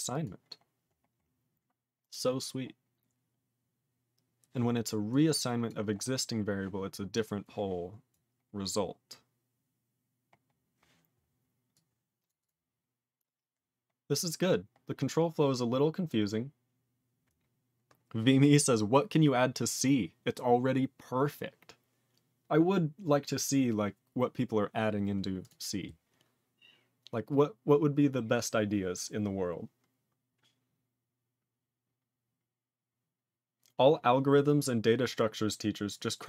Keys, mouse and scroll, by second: 0.2 click, 0.5-3.2 scroll up 16, 3.2 scroll up 1, 5.1 click, 5.6 click, 6.4 scroll down 1, 7.1 click, 8.1 click, 8.5-9.6 scroll down 9, 10.2-10.6 scroll down 4, 11.7 click, 12.2 click, 12.4 click, 12.4 click, 12.7-13.5 scroll down 7, 14.2-18.9 scroll up 15, 25.4 click, 25.4 click.